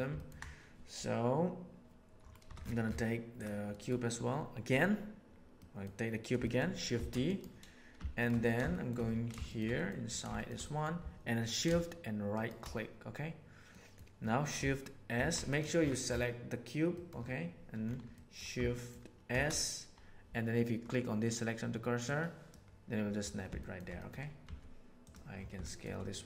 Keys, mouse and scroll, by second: 0.1 ctrl+middle click, 3.6 middle click, 5.6 middle click, 6.4 shift+middle click, 6.9 shift+d, 8.2 middle drag, 8.7 shift+middle drag, 9.0 scroll down 1, 9.4 middle click, 9.7 middle click, 10.3 shift+middle click, 10.6 middle click, 12.3 shift+right click, 13.7 middle click, 15.1 shift+s, 16.9 middle click, 18.1 middle click, 18.7 shift+middle click, 19.2 shift+s, 23.6 shift+middle drag, 23.9 middle click, 24.4 s, 25.6 shift+middle click, 26.0 middle click.